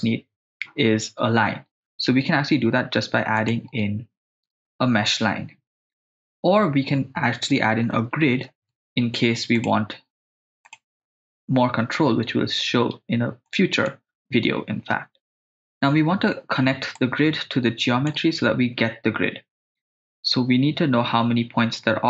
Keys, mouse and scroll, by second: 2.2 shift+a, 7.6 BackSpace, 7.7 BackSpace, 13.5 click, 17.0-18.1 drag.